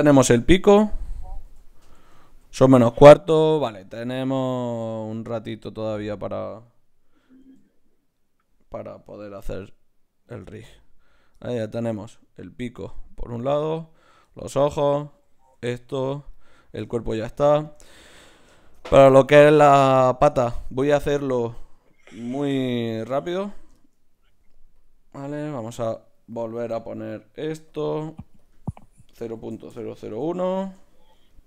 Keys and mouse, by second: 0.1 n, 1.1 click, 1.5 n, 1.9 click, 5.3 Tab, 6.0 right click, 7.4 g, 9.4 m, 11.1 right click, 22.4 shift+s, 23.8-24.8 middle drag, 24.8-26.8 drag, 26.6-29.7 right drag, 27.7-29.7 drag, 29.7 KP_0, 31.2 middle click.